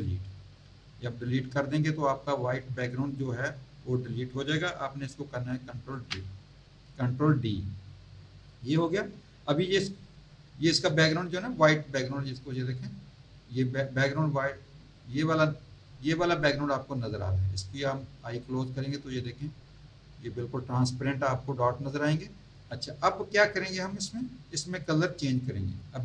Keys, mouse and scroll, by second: 5.9 ctrl+d, 13.9 click, 16.1-16.6 scroll up 1, 16.8-17.2 scroll down 1, 18.4 click, 23.0 click, 25.0 click.